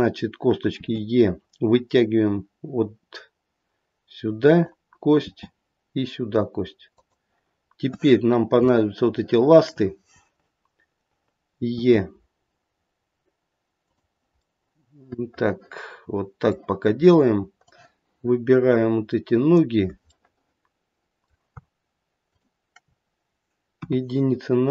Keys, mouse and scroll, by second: 0.7 e, 5.2 e, 8.1-8.7 scroll up 2, 8.7 shift+middle click, 9.6 shift+middle click, 11.7 e, 14.4 middle click, 17.0-17.3 scroll down 2, 17.6 click, 20.1 middle click, 22.3 shift+click, 23.8 KP_1.